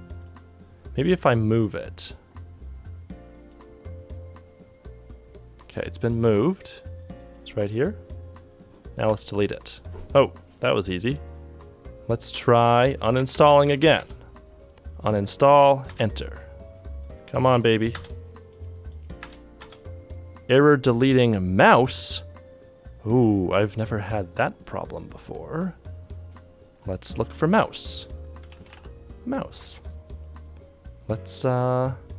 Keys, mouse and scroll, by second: 11.2-11.9 typing, 15.2 typing, 28.1-29.2 typing.